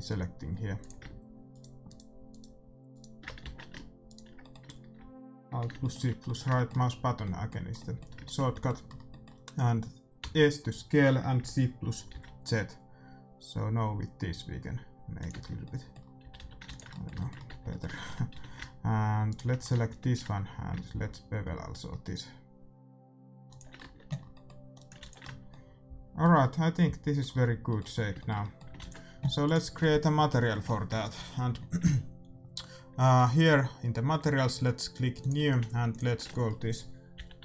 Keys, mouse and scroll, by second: 0.5 middle click, 0.7-2.6 drag, 1.5-5.8 right drag, 3.4 ctrl+z, 4.4-12.0 middle drag, 10.1 s, 15.3 Tab, 15.4-17.0 middle drag, 16.2 a, 16.3 a, 16.6 ctrl+s, 17.4 Tab, 18.3 a, 19.2 right click, 20.0 ctrl+b, 23.7-24.7 middle drag, 23.8 Tab, 24.7-26.8 drag, 24.9 ctrl+s, 24.9-26.6 right drag, 28.7 ctrl+s, 29.4-31.2 right drag, 31.2-35.1 middle drag, 35.1-37.4 drag.